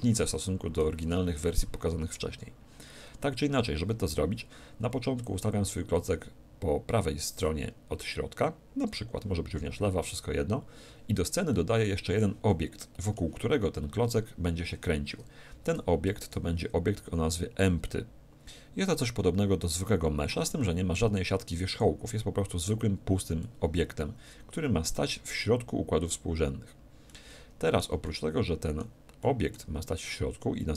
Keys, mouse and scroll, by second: 5.2-7.1 drag, 11.5-14.4 middle drag, 16.1 shift+a, 23.4-25.3 middle drag, 27.1-30.7 middle drag.